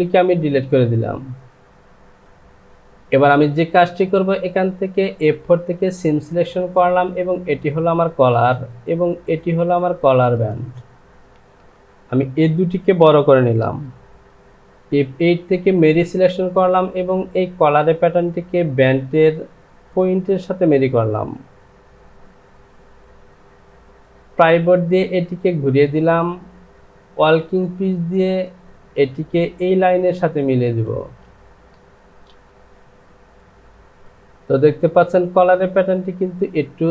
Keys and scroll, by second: 13.6 Return, 22.5 Home.